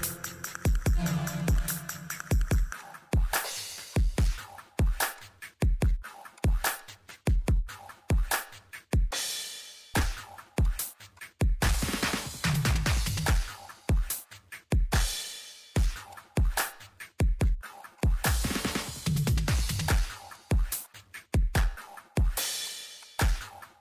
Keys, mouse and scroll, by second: 5.8 Escape, 6.3 click, 9.9 Escape, 10.6 click, 11.4 scroll down 1, 12.0 scroll up 1, 12.7 click, 15.1 middle click, 15.8 scroll up 1, 16.6 middle click, 17.2 scroll down 1, 17.6 click, 18.7 middle click, 20.3 click, 23.0 click, 23.5 middle click.